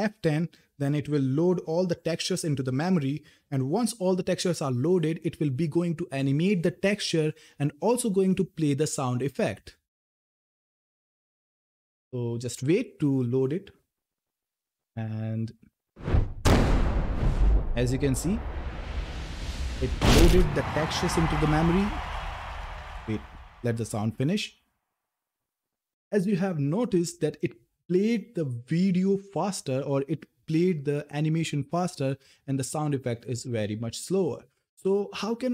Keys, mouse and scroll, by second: 0.7 ctrl+F10.